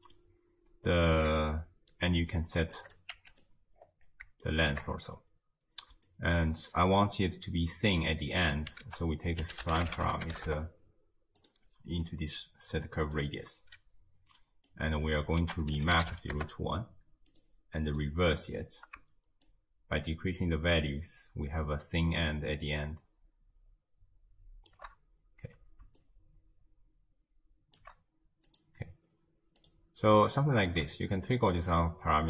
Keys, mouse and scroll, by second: 1.5-3.5 shift+drag, 3.8-4.5 scroll up 4, 4.5-4.9 shift+middle drag, 4.9-6.1 scroll up 4, 6.1-6.6 shift+middle drag, 6.6-7.5 scroll down 2, 8.9 ctrl+a, 12.0 drag, 14.7 click, 15.4 ctrl+a, 18.0 click, 19.5-22.6 shift+drag, 26.0-28.6 shift+drag, 29.1-29.6 scroll down 3, 29.6 click, 30.4-31.7 shift+middle drag, 31.7-32.2 shift+drag.